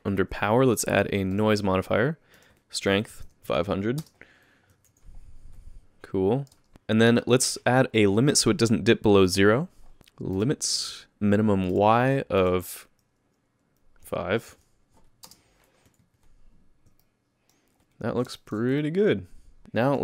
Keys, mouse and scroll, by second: 0.7 click, 2.4 click, 3.2 KP_0, 4.0 space, 4.9 alt+a, 6.5 space, 6.7 click, 6.7 KP_0, 7.1 space, 9.9 click, 11.7 click, 12.4 click, 15.2 space, 16.0 alt+a, 17.0 middle click, 18.0-18.4 scroll down 5, 18.4 shift+middle click, 18.8 middle click, 19.6 middle click, 19.9 click.